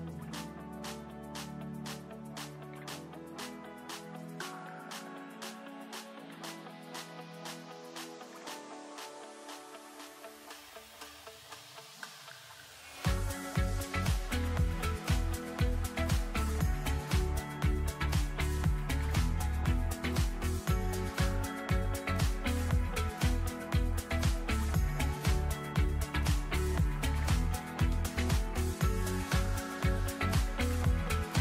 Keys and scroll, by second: 17.9 ctrl+x, 20.3 ctrl+shift+v, 25.7 Delete.